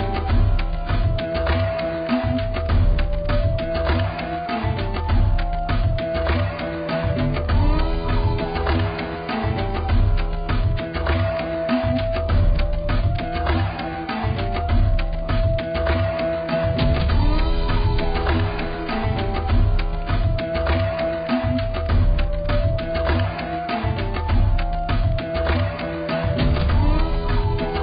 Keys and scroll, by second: 1.4 2.